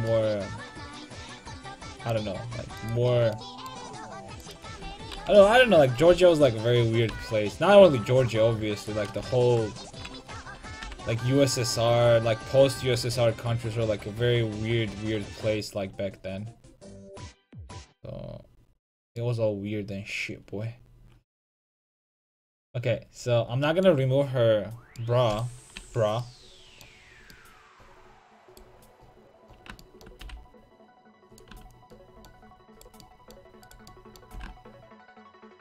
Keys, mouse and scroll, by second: 2.8-6.9 right drag, 5.3 KP_5, 5.4 KP_3, 7.1 g, 8.9-10.8 right drag, 9.8 alt+o, 10.8 g, 19.0-20.7 drag, 19.2-20.7 middle drag, 25.8 a, 28.5-31.3 right drag, 30.2 g, 31.5 a, 32.8-34.0 right drag, 34.3 g.